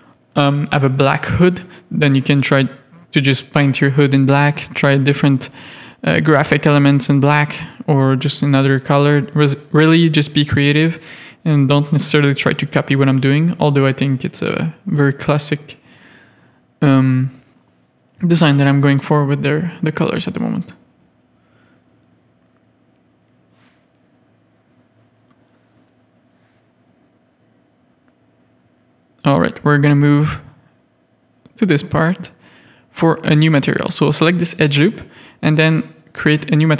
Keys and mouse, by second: 1.0 ctrl+KP_Add, 2.2 ctrl+KP_Add, 3.6 shift+middle click, 3.7 shift+click, 4.2 z, 4.9 z, 5.7 shift+click, 6.5 z, 8.3 alt+shift+click, 9.7 shift+click, 11.2 click, 11.9 Tab, 14.0 shift+middle click, 15.1 middle click, 15.7 middle click, 16.2 Tab, 16.7 3, 17.3 alt+click, 17.9 ctrl+KP_Add, 18.9 click, 19.5 Tab, 19.9 alt+a, 21.9 shift+middle click, 22.8 shift+middle click, 23.6 Tab, 24.1-26.2 middle drag, 27.9 middle click, 28.1 shift+middle click, 29.5 middle click, 29.7 3, 30.3 alt+click, 31.1 z, 34.4 ctrl+KP_Add.